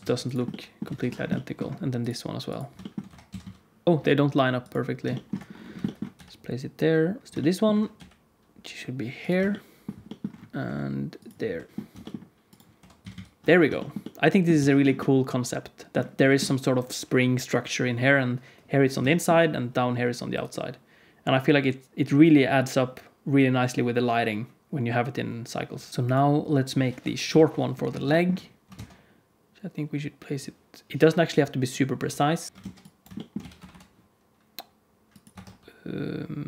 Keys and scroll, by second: 0.8 alt+a, 3.0 r, 3.8 alt+a, 3.8 ctrl+s, 3.8 KP_3, 3.8 z, 6.1 g, 7.2 r, 7.9 g, 10.6-12.7 typing, 13.4 alt+a, 13.4 ctrl+s, 14.6 ctrl+s, 26.1 ctrl+s, 26.9 KP_1, 27.2 KP_3, 28.7 shift+d, 31.9 r, 32.5 Tab, 32.5 alt+z, 33.3 g, 35.2 Tab, 35.4 r.